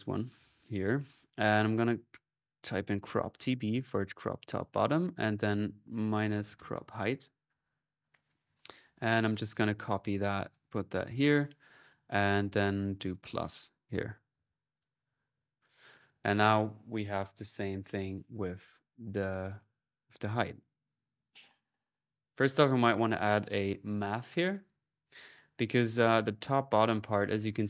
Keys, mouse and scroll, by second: 15.0 typing, 15.5 middle click, 21.8-24.2 typing, 22.0 click, 22.6 right click, 22.9 click, 24.4 click, 24.9 click, 25.9 click, 26.7-27.6 middle drag.